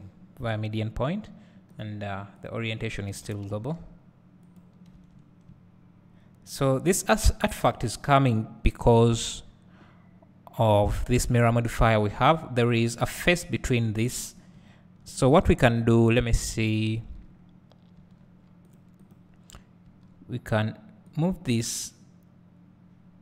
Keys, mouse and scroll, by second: 0.0 click, 0.4 scroll up 2, 2.4-4.6 drag, 3.3 s, 5.7 `, 7.0 click, 12.4-13.5 scroll up 1, 13.5 `, 17.0 Tab, 18.4 Tab, 18.8 click, 20.0 Tab, 21.2-23.2 drag.